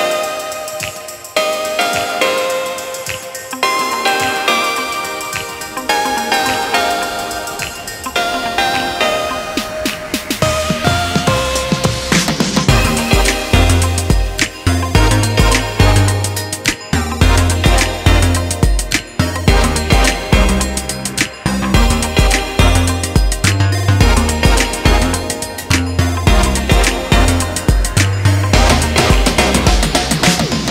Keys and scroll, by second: 1.7-2.5 typing, 5.7-6.5 typing.